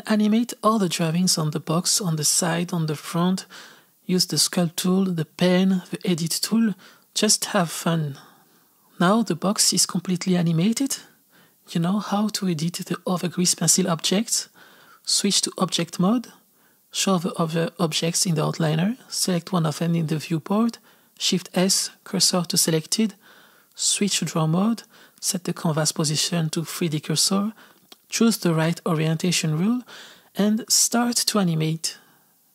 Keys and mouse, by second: 0.0-2.6 typing, 0.0 click, 0.4 shift+middle click, 0.5 click, 1.3 click, 2.0 shift+middle click, 2.3 click, 2.5 shift+middle click, 2.8 shift+middle click, 2.9 click, 3.3 click, 3.7 z, 3.7 click, 3.9 f, 4.0 click, 4.9 shift+middle click, 5.0 click, 5.2 r, 5.4 click, 5.8 f, 5.9 click, 7.1 click, 7.6 click, 7.8 r, 7.9 click, 8.0 f, 8.1 click, 8.5-9.6 drag, 9.6 space, 15.7-18.0 drag, 18.1 click, 19.7 click, 21.7 shift+s, 23.9-30.8 drag, 31.4 click, 31.5-32.5 typing, 31.5 click, 32.0 click.